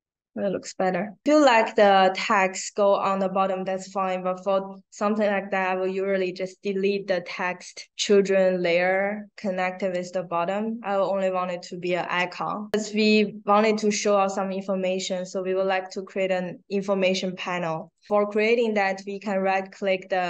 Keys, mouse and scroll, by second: 1.4 click, 2.1 click, 9.9 click, 14.4 right click, 15.7 right click, 17.8 click.